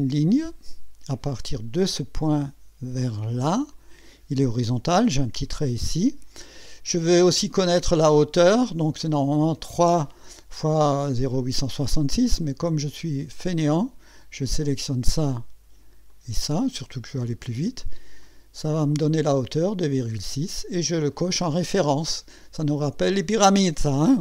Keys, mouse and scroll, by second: 1.8 click, 3.7 click, 7.2 right click, 12.4 right click, 13.3 click, 14.4 click, 16.1 click, 18.2 click, 21.1 click, 24.0 click.